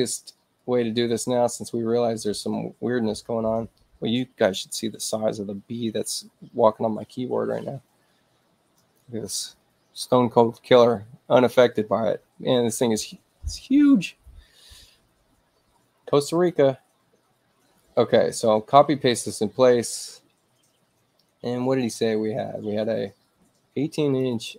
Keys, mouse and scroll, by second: 0.5-8.9 drag, 8.7 right click, 17.7-19.0 drag, 24.0 click, 24.2 click.